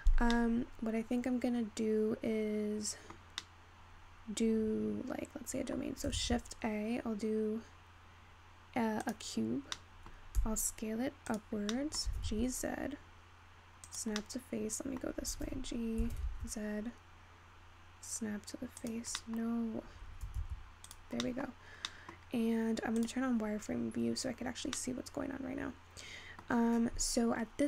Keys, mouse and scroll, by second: 8.2 shift+a, 10.2-22.6 middle drag, 22.6-27.6 scroll up 5.